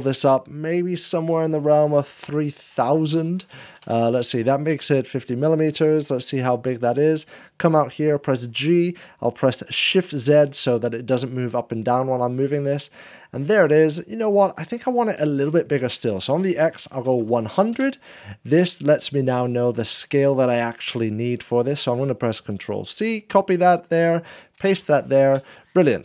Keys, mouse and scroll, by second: 2.1 3, 2.1 0, 2.2 0, 5.8 3, 5.9 ., 6.6 Return, 6.6 scroll down 1, 8.2 g, 10.1 g, 10.1 shift+z, 13.1 click, 13.1-13.8 scroll down 1, 13.1 ., 13.1 g, 13.1 shift+z, 14.0 shift+middle click, 14.4-26.0 drag, 16.8 1, 17.0 0, 17.1 1, 17.7 Return, 21.1 1, 21.1 0, 23.6 ctrl+c, 23.6 Return, 25.2 ctrl+c.